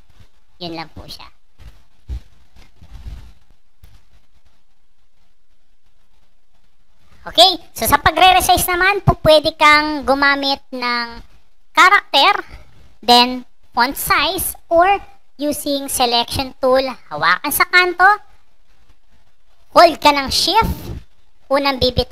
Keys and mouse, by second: 0.7 click, 1.9-3.2 drag, 6.0 click, 11.4 click, 18.3-22.1 drag.